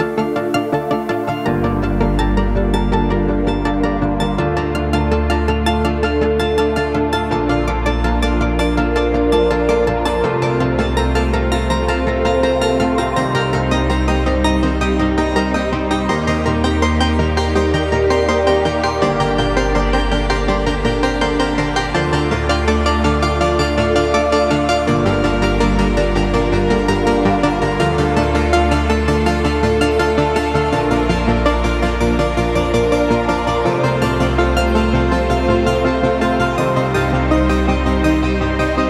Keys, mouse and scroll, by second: 0.2 right click, 5.9 right click, 6.6-21.1 drag, 10.3 typing, 21.1 ctrl+g, 21.5 click, 21.6-24.3 drag, 24.3-32.5 shift+drag, 29.1 typing, 32.5 Up, 34.3 Left, 36.5 click, 36.5 typing.